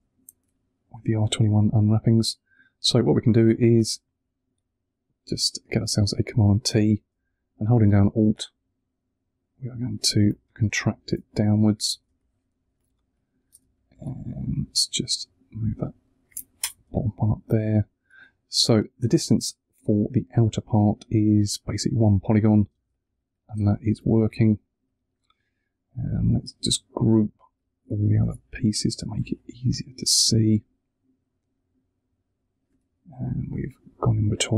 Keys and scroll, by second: 3.6 super+t, 10.9 Return, 11.8 space, 13.9 super+t, 16.5 Return, 22.7 space, 23.8 super+`, 28.1 super+g.